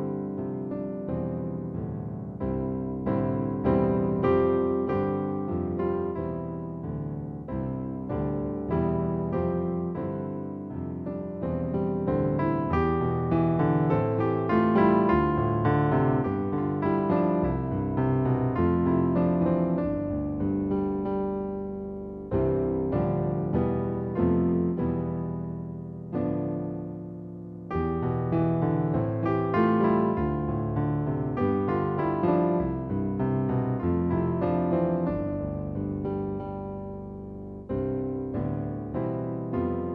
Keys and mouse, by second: 1.3 click, 3.9 click, 6.1 click, 7.1 click, 11.4 click, 12.3 click, 15.5 click, 18.9 click, 19.6 click, 23.0 click, 24.6 KP_0, 26.0 super+middle click, 26.6 shift+middle click, 27.2 super+middle click, 27.9 shift+middle click, 33.7 click, 36.4 click, 37.4 click.